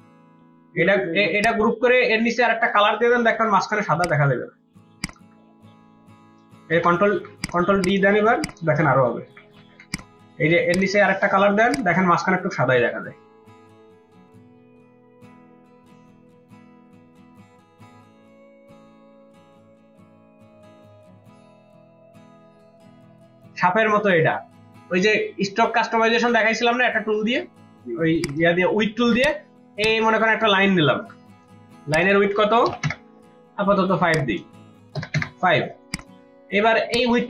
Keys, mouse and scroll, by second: 0.7 ctrl+g, 1.3 ctrl+g, 3.3 typing, 4.6-6.3 typing, 6.7 ctrl+d, 7.8 double click, 9.2 ctrl+d, 9.5 ctrl+d, 12.7-13.7 typing, 22.8 ctrl+space, 22.9 ctrl+click, 28.2 right click, 30.9 v, 35.6 Return.